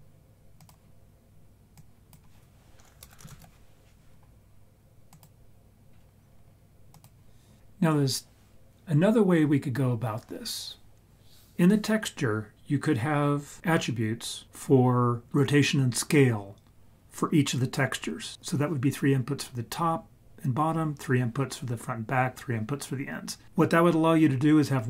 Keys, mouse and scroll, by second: 1.7-6.9 drag.